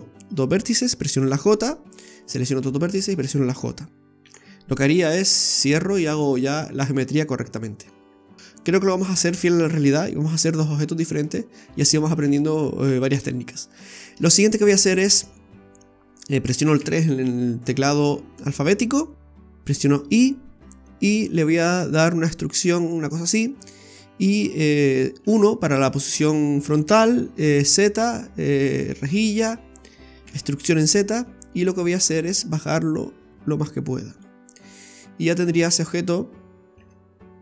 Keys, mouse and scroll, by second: 1.1 j, 2.2 right click, 2.9 shift+right click, 4.2 j, 6.0-6.3 scroll down 3, 6.3 middle click, 7.6-8.1 scroll down 2, 7.9 middle click, 8.3 scroll up 1, 11.9-12.3 scroll down 1, 12.3 middle click, 13.3 shift+middle click, 13.7-14.2 scroll up 5, 14.3 shift+middle click, 16.8 3, 17.5 right click, 18.1 scroll down 1, 18.2 shift+middle click, 23.6 middle click, 25.2 KP_1, 27.6 z, 30.2 e, 34.4-35.1 scroll up 2, 34.8 middle click, 35.5-36.8 scroll down 4, 36.8 Tab.